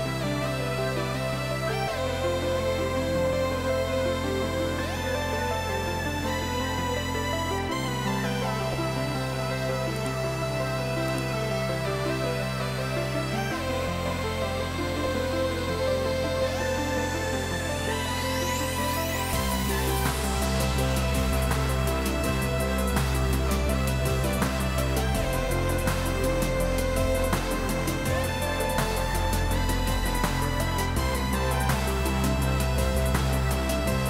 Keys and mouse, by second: 4.5 click, 7.2 click, 16.1 click, 17.3 Escape, 18.4 click, 21.3 click, 22.7 click, 23.8 KP_2, 24.2 BackSpace, 24.3 KP_3, 24.4 Return, 27.4 click, 30.2 click, 30.7 KP_3, 30.8 Return, 31.7 click.